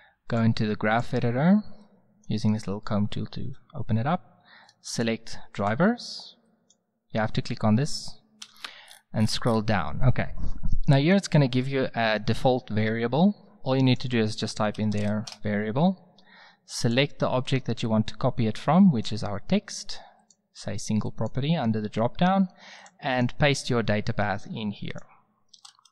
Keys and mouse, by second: 8.4 n, 23.5-24.5 middle drag, 24.9 middle click.